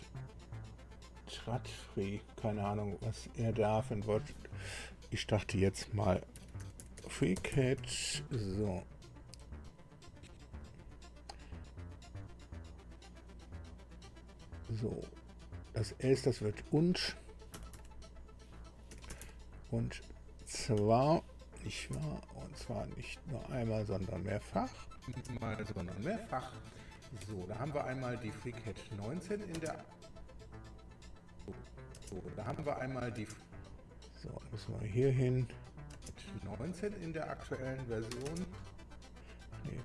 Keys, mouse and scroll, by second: 3.0 click, 6.1-8.3 typing, 9.5 click, 10.6 click, 16.3 click, 17.5 Delete, 18.9 u, 19.2 n, 19.8 d, 20.8 Right, 21.9 z, 24.8 click, 25.1 space, 30.1 space, 31.1 click, 32.6 space, 34.2 click, 35.0 click, 35.9 space, 39.7 click.